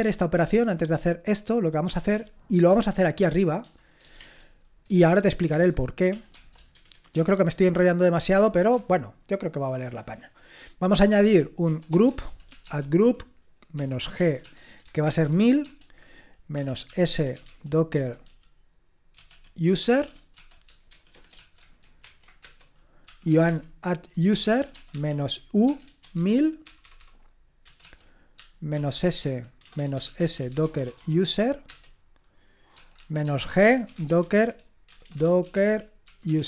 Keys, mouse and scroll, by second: 1.9-4.2 typing, 5.5-7.1 typing, 8.3-8.7 typing, 10.6-21.3 typing, 22.4-36.4 typing.